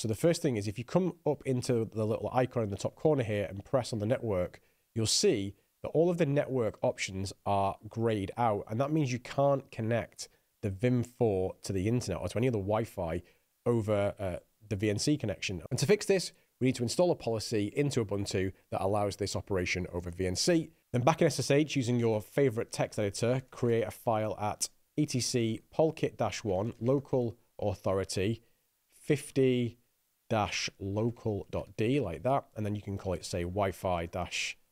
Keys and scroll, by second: 21.8-34.7 typing.